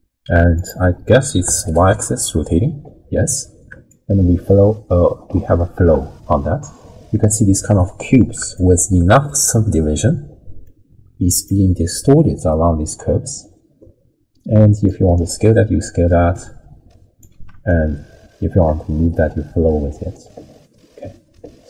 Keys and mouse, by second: 0.5-1.9 drag, 3.9-7.3 shift+drag, 8.6 shift+middle click, 10.7-11.5 drag, 14.9-17.2 drag, 17.7-21.6 shift+drag.